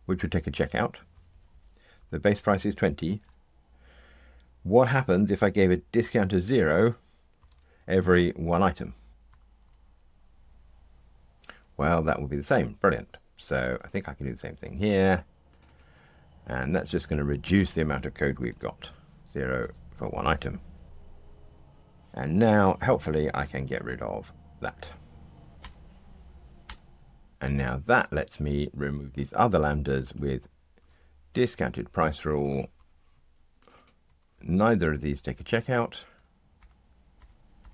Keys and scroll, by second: 9.2 ctrl+r, 14.7 super+c, 20.8 ctrl+r, 23.9 alt+Return, 30.8 super+c, 31.7 super+v, 36.5 Delete.